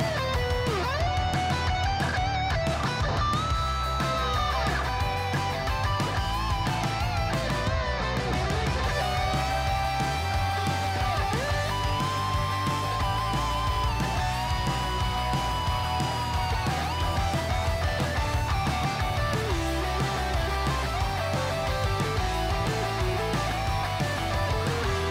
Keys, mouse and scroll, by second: 0.3-25.1 typing, 0.4 click, 2.0 click, 3.0 click, 3.9 click, 4.4 click, 4.9 click, 5.4 click, 5.9 click, 6.5 click, 6.9 click, 7.4 click, 7.9 click, 8.4 click, 8.9 click, 9.4 click, 9.9 click, 10.4 click, 11.0 click, 11.6 click, 12.0 click, 12.4 click, 12.9 click, 13.7 click, 14.2 click, 16.7 click, 17.4 click, 17.8 click, 18.2 click, 18.9 click, 19.4 click, 20.0 click, 20.6 click, 21.0 click, 21.4 click, 21.8 click, 22.5 click, 22.9 click, 23.4 click, 23.8 click, 24.2 click, 24.7 click.